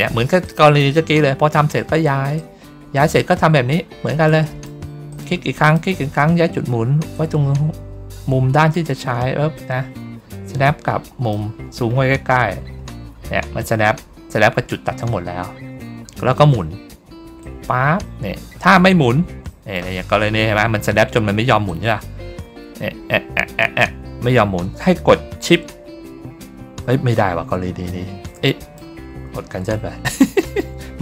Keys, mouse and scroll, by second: 0.3 click, 2.3 click, 3.3 ctrl+middle click, 4.2 click, 5.0 click, 5.5 click, 7.0-8.6 drag, 9.4-11.2 drag, 11.4 ctrl+middle click, 11.8 ctrl+middle click, 15.0 ctrl+middle click, 15.4 ctrl+middle click, 15.8 ctrl+middle click, 17.3-19.6 drag, 21.6-28.6 drag.